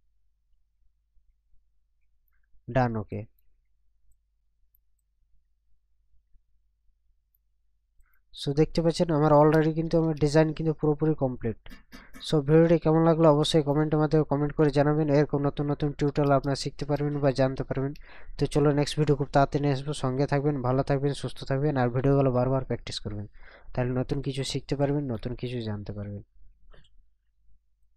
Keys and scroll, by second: 9.9 ctrl+KP_Subtract, 16.3 ctrl+KP_Add, 17.6 ctrl+KP_Subtract.